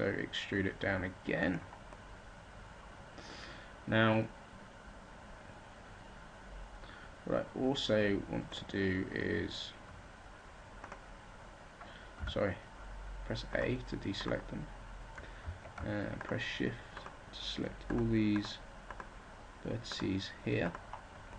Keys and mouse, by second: 5.5-8.2 middle drag, 12.1 a.